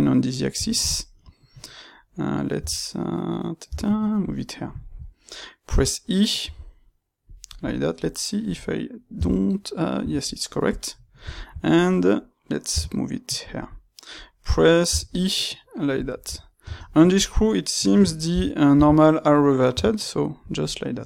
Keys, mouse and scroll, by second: 2.5 g, 4.2 click, 4.4-7.3 shift+middle drag, 6.3 e, 7.5 click, 7.9-10.6 middle drag, 9.1 g, 10.0 Escape, 10.6 click, 10.8-13.4 middle drag, 12.6 g, 13.4 click, 13.5-15.9 middle drag, 14.8 e, 15.9 click, 16.2 Tab, 16.5 space, 17.2 space, 20.4 click, 20.7-21.0 middle drag.